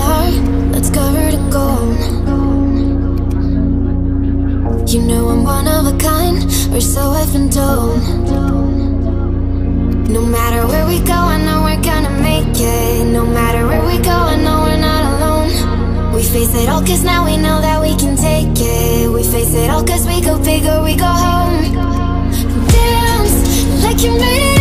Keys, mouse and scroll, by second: 6.9-8.4 drag, 8.4-17.2 drag, 21.3-24.6 drag.